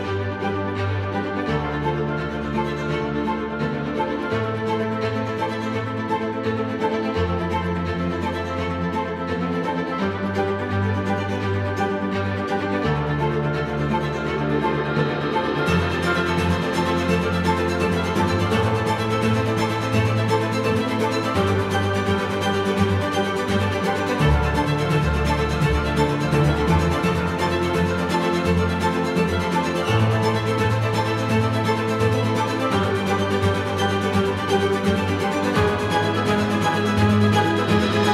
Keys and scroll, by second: 4.8 ctrl+F1, 30.6 ctrl+F4.